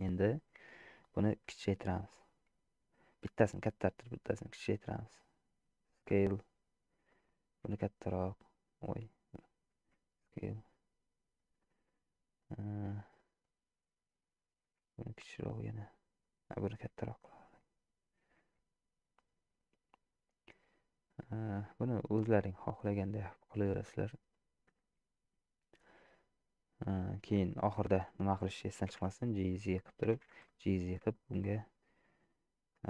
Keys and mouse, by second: 3.7 s, 7.1 click, 7.9 s, 9.8 s, 13.0 click, 14.8 s, 17.0 s, 18.5 s, 22.4 s, 24.9 s, 26.9 middle click, 27.5 shift+middle click, 28.9 g, 30.2 g, 31.7 middle click.